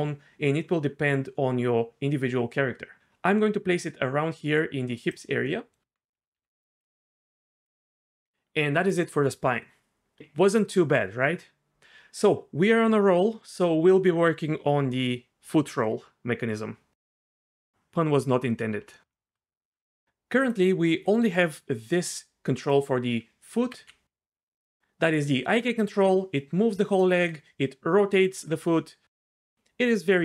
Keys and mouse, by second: 5.8 Tab, 6.3 r, 6.8 g, 20.9 g, 23.6 r, 23.8 r, 25.1-25.5 middle drag, 26.2 g, 28.4 r, 29.6 r, 29.7 r.